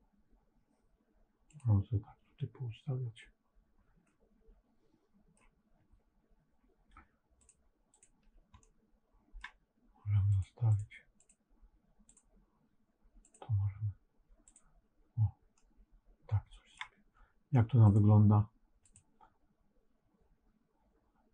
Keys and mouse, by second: 3.9-5.3 middle drag, 7.3 click, 7.8 click, 8.5 middle click, 10.2 click, 10.6 click, 11.1 click, 14.4 click, 15.5-16.7 middle drag, 17.8 click.